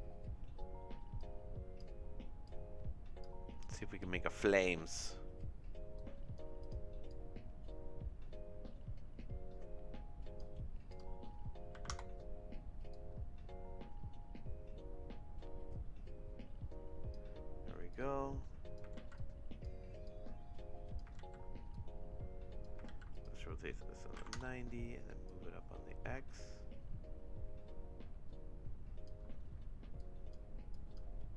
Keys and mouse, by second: 1.3 click, 2.5 click, 4.9 middle click, 5.9 click, 7.1-10.4 drag, 10.9-12.4 drag, 12.9-17.2 drag, 17.9 click, 19.1 ctrl+z, 19.1 click, 20.0 click, 21.4 ctrl+z, 21.7 click, 22.9 ctrl+z, 23.1-24.6 drag, 25.2-29.0 drag, 29.9 click, 30.7 click.